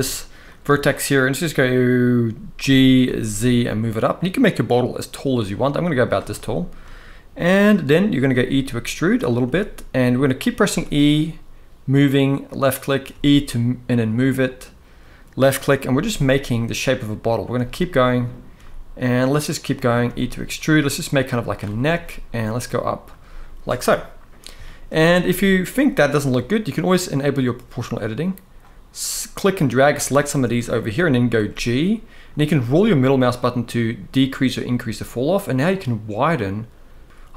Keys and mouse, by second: 2.3 g, 2.8 z, 5.7 click, 6.0-6.4 shift+middle drag, 8.0 e, 8.9 click, 9.1 e, 10.1 click, 10.4 e, 12.1 click, 12.8 e, 15.2 click, 15.6 e, 17.2 e, 18.0 click, 18.2 e, 19.3 click, 19.8 e, 21.1 click, 21.6 e, 22.8 click, 24.3 shift+middle click, 28.4-29.6 drag, 31.1 g.